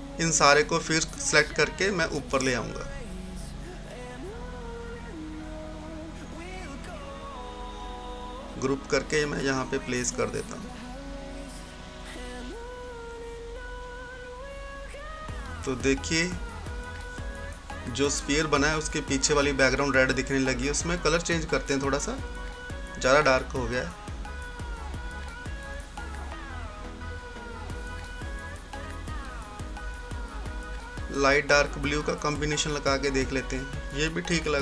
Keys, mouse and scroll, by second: 2.6 scroll down 1, 3.5 click, 3.6-6.2 drag, 6.2 right click, 7.2-13.6 drag, 13.6 scroll up 1, 14.5-24.7 drag, 24.7-29.9 drag, 30.4-34.6 drag.